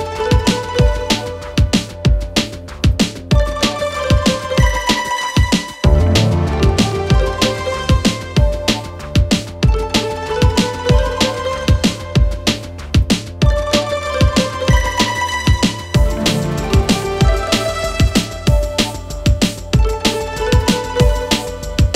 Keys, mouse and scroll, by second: 0.5-2.0 scroll down 12, 2.0 click, 2.4 scroll up 2, 2.6 click, 3.0 Tab, 3.2 click, 3.5 click, 3.7 click, 4.4 click, 5.0 3, 5.1 click, 6.1 click, 6.6-7.0 drag, 7.2 click, 8.0 e, 10.2 click, 11.0 click, 11.2-11.8 scroll down 2, 11.8 click, 12.8 a, 13.4 a, 14.4 shift+click, 15.3-18.2 drag, 20.3 click, 21.1 click.